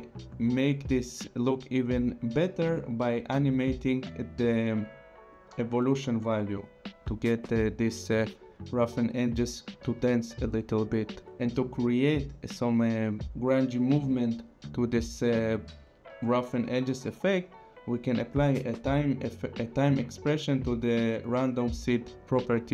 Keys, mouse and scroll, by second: 5.3 click, 9.8 ctrl+z, 18.2 click.